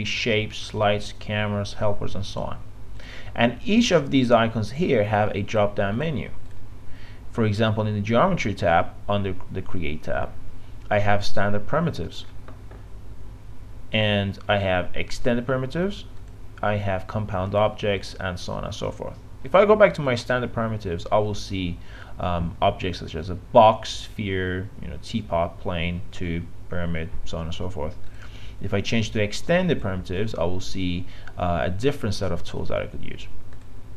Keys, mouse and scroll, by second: 31.9-33.9 drag.